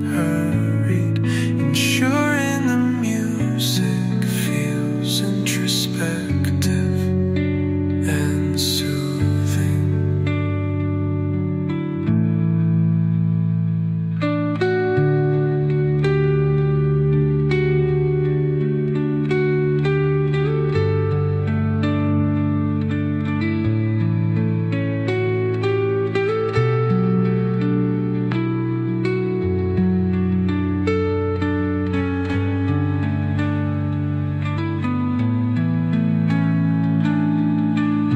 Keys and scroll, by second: 30.1 space, 35.2 space.